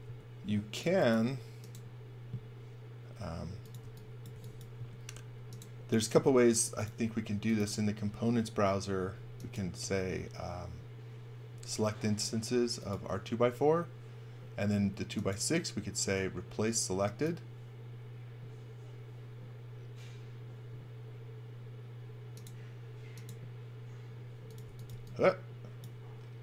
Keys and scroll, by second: 0.0 space, 3.8 x, 4.3 v, 4.8 space, 24.4-26.4 typing.